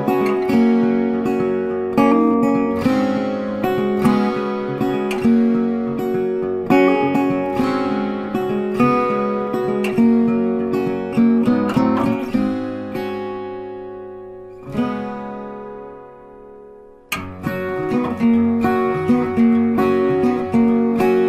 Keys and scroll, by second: 11.5 ctrl+t.